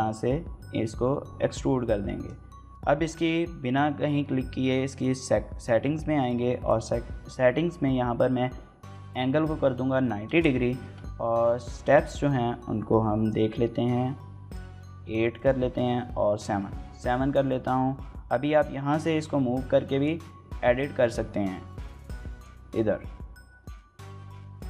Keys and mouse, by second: 6.5-10.9 drag, 11.6-14.3 drag, 15.1 click, 18.4-19.8 drag, 20.5-22.2 drag, 23.6 middle click, 24.3 e.